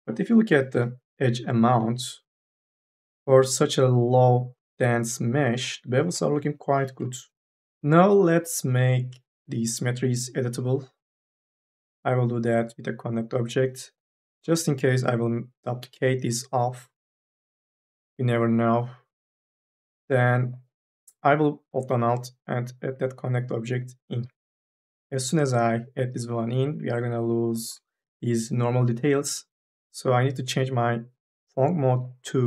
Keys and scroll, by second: 0.5 n, 0.8 b, 6.1 b, 6.5 a.